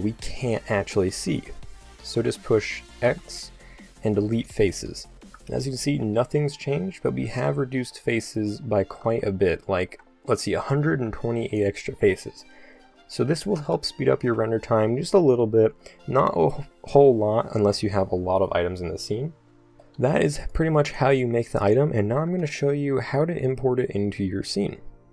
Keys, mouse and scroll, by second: 1.4 z, 3.1 x, 6.1 Tab, 9.5 ctrl+z, 10.9 x, 13.4 Tab, 14.4 a, 14.7-16.8 middle drag, 19.8-21.4 right drag, 22.6 click.